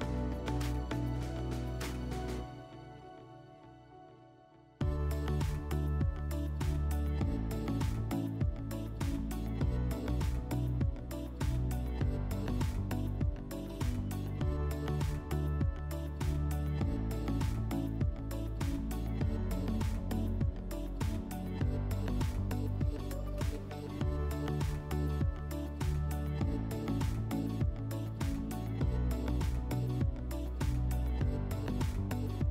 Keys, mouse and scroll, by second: 3.8 click, 11.0 click, 14.5 middle click, 15.6 click, 16.5 click, 22.1 click, 24.2 click, 24.9 click, 25.4 click, 30.3 click, 31.1 click, 32.2 click.